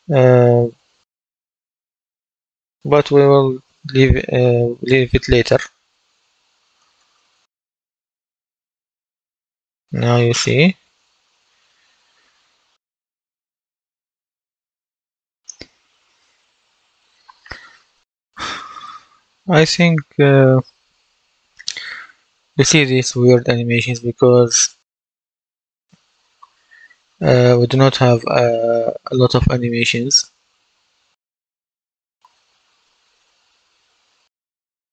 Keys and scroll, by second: 0.9 a, 4.8 space, 6.7 space, 9.7 w, 10.4 w, 16.6 F11, 18.7 w, 20.5 a, 25.4-26.9 typing, 29.8 d, 30.4 s, 30.9 a, 32.2 w, 33.7 d, 34.8 s.